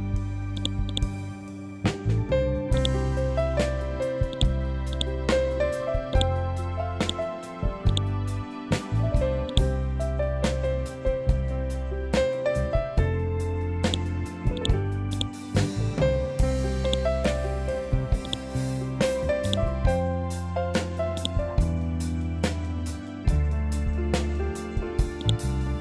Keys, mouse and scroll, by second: 0.7 scroll down 1, 2.2 click, 8.3 scroll down 1, 8.9 click, 9.3-10.0 scroll down 1, 10.0 scroll up 1, 12.0 scroll down 1, 13.3 click, 15.5 scroll up 1, 16.3 click, 17.7 shift+click, 21.4 scroll up 1, 23.2 scroll down 1, 24.7 click.